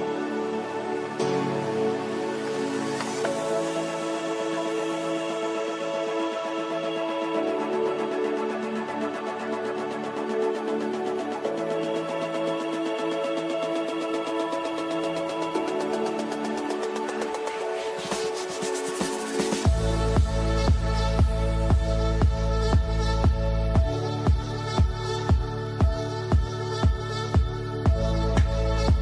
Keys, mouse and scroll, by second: 0.7 click, 3.5-6.7 typing, 7.7 ctrl+space, 8.5 shift+click, 8.8 c, 9.0-15.9 shift+drag, 15.9 click, 16.8 ctrl+g, 17.1 shift+click, 17.4 c, 18.3-20.1 drag, 20.4-21.4 typing, 22.7-24.5 drag, 24.5 shift+click, 24.7 shift+c, 24.9 shift+click, 26.3 right click, 27.7 click, 28.3 shift+click, 28.5 shift+c.